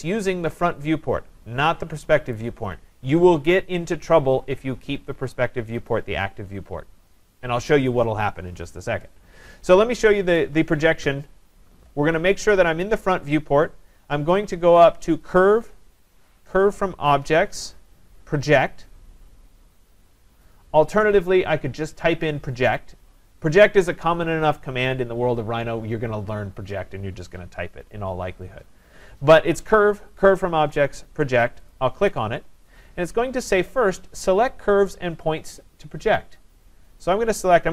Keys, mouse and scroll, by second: 5.9 click, 10.4 click, 15.4 click, 31.7 click, 33.5-36.9 drag.